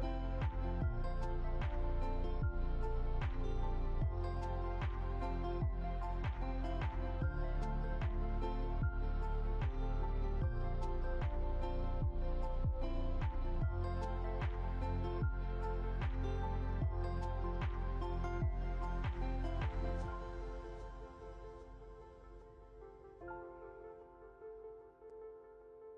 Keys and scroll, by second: 0.2 Down, 0.6 Left, 0.9 Down, 1.3 Left.